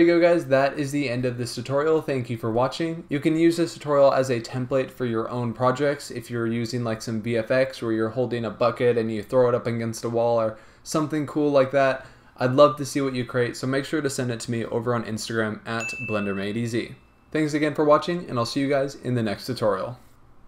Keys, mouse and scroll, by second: 0.0 click, 19.6 click.